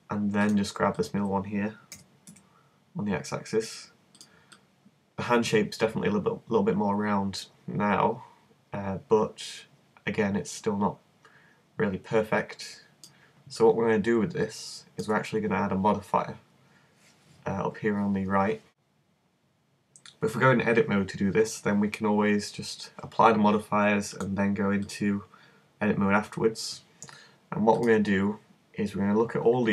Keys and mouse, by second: 2.0 g, 13.7-15.3 middle drag, 24.1 click, 26.2 click, 27.8-29.7 drag.